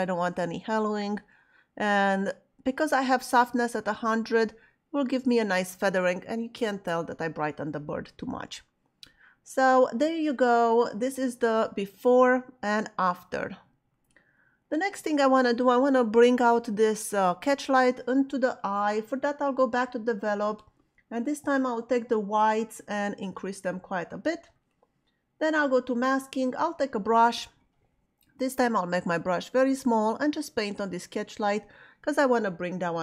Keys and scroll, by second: 28.2 [.